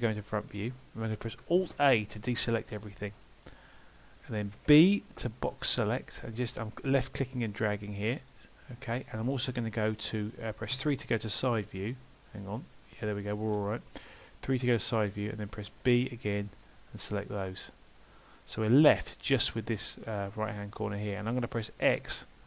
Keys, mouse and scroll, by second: 1.6 alt+a, 4.6 b, 10.8 KP_3, 12.3 middle click, 14.6 KP_3, 15.7 b, 17.5 middle click, 20.3 middle click, 22.0 x.